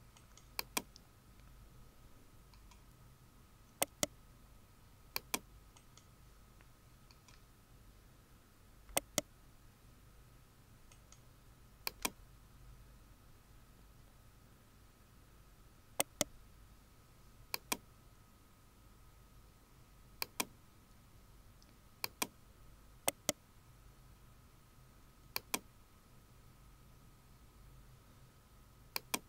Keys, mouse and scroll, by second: 1.0-1.6 scroll down 1, 3.8 right click, 7.5 scroll down 1, 8.9 right click, 14.8-15.4 scroll down 1, 16.0 right click, 18.4-18.8 scroll down 1, 23.1-23.5 scroll down 1, 25.7 scroll down 1.